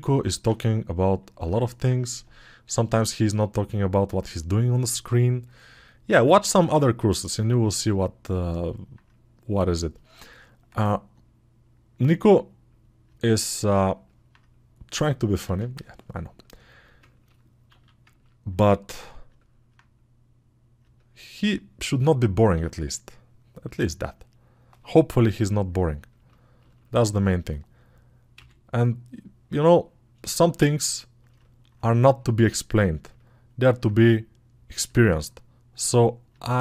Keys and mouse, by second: 2.4-14.1 alt+drag, 14.1-20.7 right drag, 31.1-33.7 alt+drag.